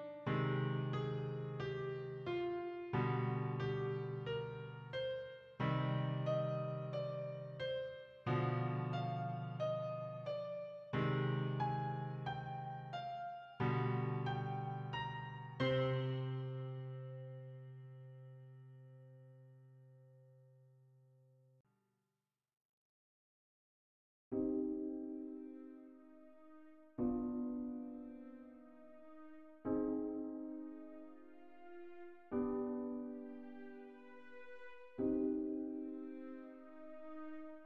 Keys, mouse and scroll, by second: 1.5 click, 4.8 v, 6.0 click, 14.4 click, 24.0 BackSpace, 25.0 typing, 33.5 click, 36.9 click.